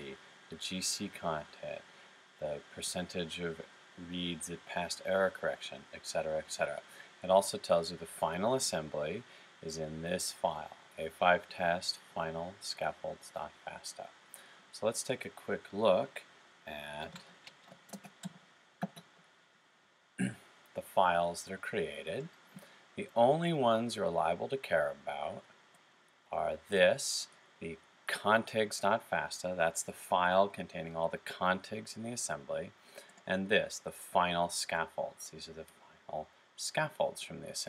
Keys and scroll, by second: 16.8-17.9 typing.